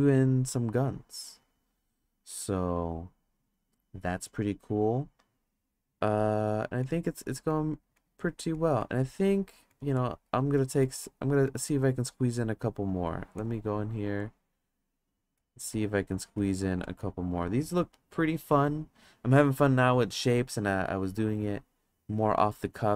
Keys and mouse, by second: 6.6 click, 6.8 click, 7.5 click, 7.9 click, 8.1 click, 8.5 click, 8.8 click, 9.7 drag, 9.9 click, 10.5 click, 10.8 click, 11.0 click, 11.5 click, 14.2 click, 15.4 click, 15.7 click, 16.4 click, 16.8 click.